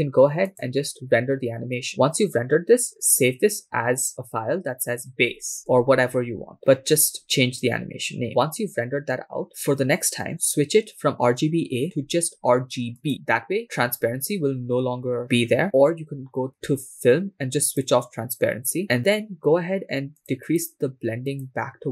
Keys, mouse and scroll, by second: 0.9-8.9 drag, 13.1 click, 15.6 click, 16.4-17.5 scroll down 2, 17.5 scroll down 2, 17.9 click, 20.2 click, 21.3 click.